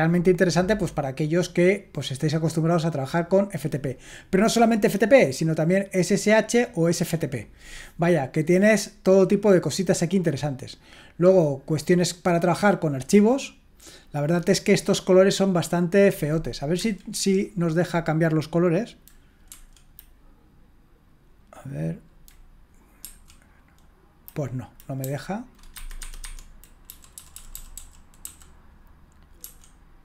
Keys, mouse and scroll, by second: 9.8-11.2 drag, 16.7 Escape, 17.1 Escape, 19.4 F9, 23.0 F9, 25.0 Down, 25.7 o, 26.0 Escape, 26.2 Escape, 26.8 Down, 27.1 Down, 27.3 Down, 27.5 Down, 27.7 Down, 28.2 Down, 29.4 F9.